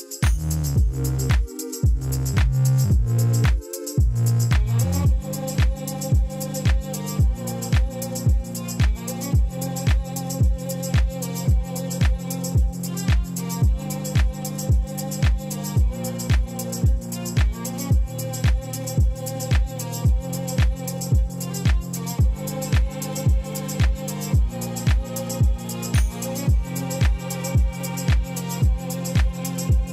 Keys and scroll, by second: 0.0 x, 3.6 3, 4.6 i, 8.6 e, 10.0 i, 13.4 e, 14.9 s, 17.1 ctrl+b, 25.4 a.